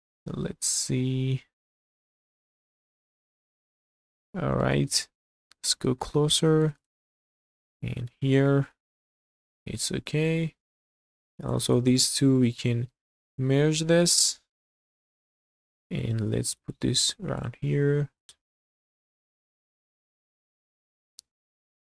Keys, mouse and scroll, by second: 3.8 shift+middle click, 4.9 scroll up 2, 5.3 shift+middle click, 5.9-6.3 scroll up 2, 6.5 shift+middle click, 6.7 shift+scroll up 1, 6.8 click, 7.3 click, 8.0 g, 9.1 click, 9.7 shift+middle click, 10.8 shift+middle click, 11.4 click, 11.7 shift+click, 12.3 m, 14.1 shift+middle click, 14.7 shift+middle click, 15.9 click, 16.6 g, 18.2 click, 18.2 ctrl+z, 18.2 h, 18.5 g, 19.5 shift+middle click, 20.6 shift+middle click, 21.1 scroll down 2, 21.8 shift+middle click.